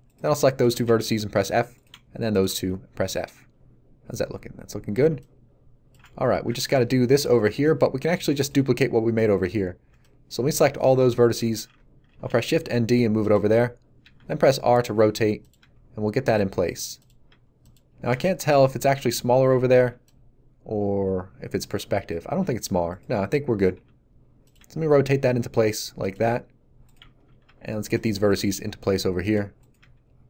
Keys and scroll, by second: 0.8 f, 3.0 a, 9.9 b, 12.0 shift+d, 14.0 r, 15.6 g, 16.6 r, 17.2 g, 22.4 g, 23.7 r, 24.5 g.